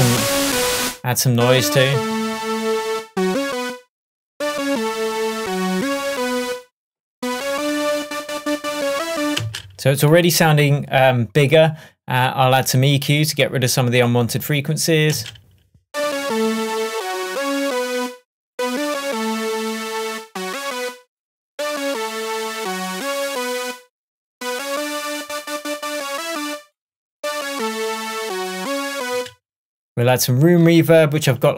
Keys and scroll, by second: 9.5 space, 15.2 space, 29.2 space, 31.4 Tab.